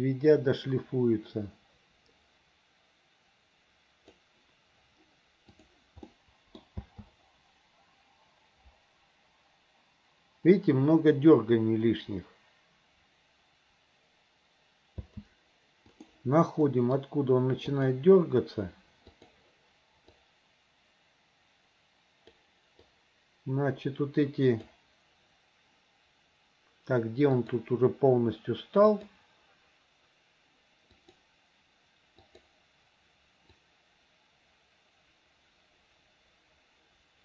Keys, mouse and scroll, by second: 5.6 click, 6.1-6.6 middle drag, 6.8 space, 15.1 space, 16.0 click, 16.7 middle drag, 17.8 click, 19.1 click, 20.2-22.4 drag, 22.9-24.7 drag, 27.4 click, 29.0 click, 31.0 click, 32.3 click, 33.7-37.2 drag.